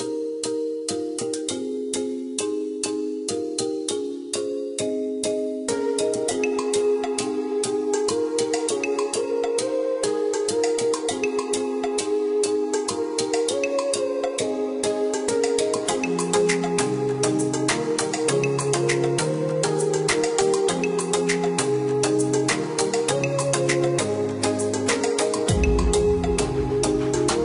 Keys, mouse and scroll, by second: 0.3 click, 1.7 click, 2.6 click, 3.3 click, 4.3 KP_0, 4.5 KP_Decimal, 4.9 KP_4, 5.6 KP_Enter, 6.2 Escape, 8.1 click, 11.3 click, 12.0 Escape, 13.5 click, 15.3 click, 16.5 click, 21.9 click, 22.3 Escape, 25.1 ctrl+click, 25.9 ctrl+click.